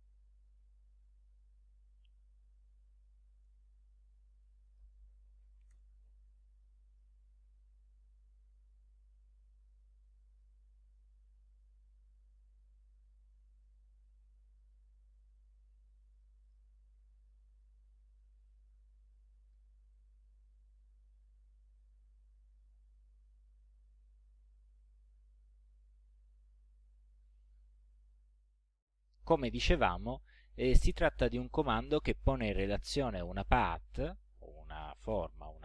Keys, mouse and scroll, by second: 1.3 ctrl+scroll up 2, 2.5 ctrl+a, 3.0 ctrl+click, 4.4 click, 5.2-6.1 typing, 6.7-7.0 ctrl+scroll up 2, 7.6 ctrl+scroll down 2, 8.5-10.0 drag, 11.5-13.8 drag, 14.6 click, 16.2 click, 16.5 click, 17.0 click, 19.9-20.9 drag, 21.8-23.5 drag, 24.3-25.3 drag, 25.9 ctrl+scroll up 2, 26.5 ctrl+scroll down 2, 32.6 click, 33.7-35.3 drag.